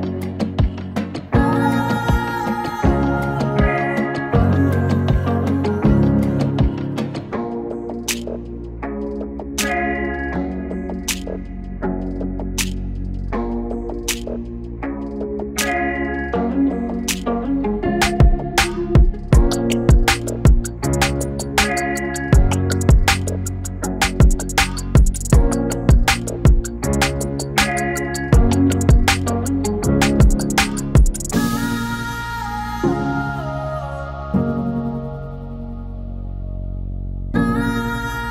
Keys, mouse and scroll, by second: 1.3 click, 2.3 alt+[, 3.9-7.0 drag, 8.9 u, 9.7-11.0 drag, 11.0 right click, 12.4 click, 15.5 n, 15.7 space, 17.1 space, 17.6 space, 18.9 p, 21.7-36.2 drag.